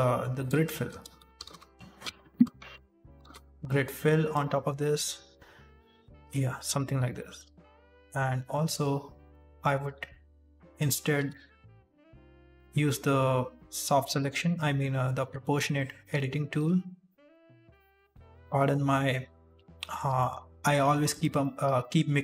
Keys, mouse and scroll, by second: 0.3 right click, 0.5 alt+right click, 0.9 space, 5.3 middle click, 7.1 middle click, 7.5 right click, 9.3 1, 9.6 right click, 10.7 click, 11.1 g, 15.9 middle click, 16.5 2, 16.9 right click, 17.2 alt+right click, 17.7 middle click, 18.4 middle click, 19.4 alt+shift+right click, 19.7 middle click, 20.1 shift+middle click, 20.3-20.7 scroll up 2, 21.0 alt+shift+right click, 21.3 middle click, 21.7 shift+middle click, 22.1 scroll up 1.